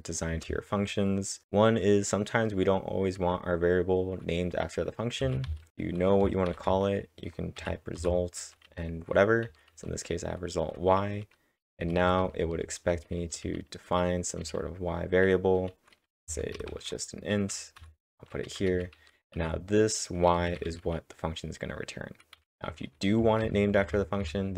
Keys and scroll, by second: 0.3 space, 5.2-6.5 typing, 12.4-14.9 typing, 16.3 a, 16.7 space, 17.5 y, 22.1-24.2 typing, 23.4 ctrl+v.